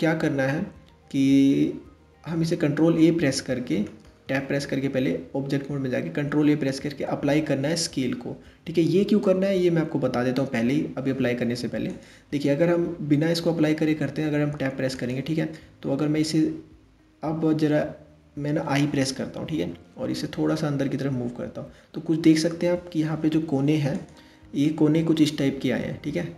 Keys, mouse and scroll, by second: 0.2-0.7 scroll down 1, 0.7-1.6 scroll up 1, 1.6-2.7 scroll up 1, 2.7 ctrl+a, 3.9 Tab, 5.8 ctrl+a, 13.4 Tab, 14.6 click, 19.2 i.